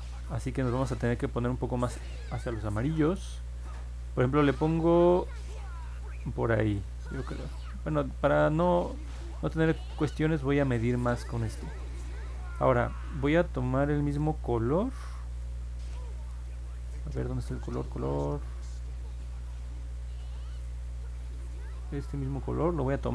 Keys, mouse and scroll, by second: 9.2 click.